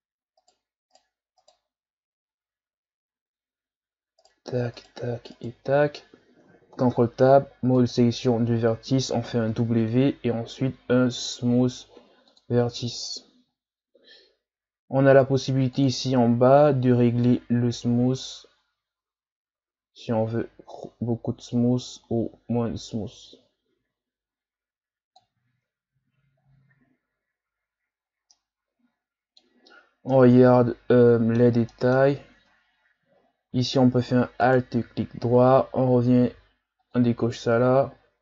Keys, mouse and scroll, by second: 0.4 shift+right click, 0.9 shift+right click, 1.4 shift+right click, 4.2 shift+right click, 4.8 shift+right click, 5.3 shift+right click, 5.7-6.7 scroll down 2, 6.7 ctrl+Tab, 9.5 w, 13.5-14.1 scroll down 5, 15.7-20.2 drag, 25.5 Tab, 26.4-27.5 scroll up 4, 28.0 scroll down 5, 28.3-29.7 middle drag, 29.7-30.1 scroll up 3, 30.1-32.1 middle drag, 32.1 scroll up 1, 32.4 Tab, 33.2-34.1 shift+scroll down 4, 34.4 alt+right click, 36.8 click, 37.8-38.2 shift+scroll down 6.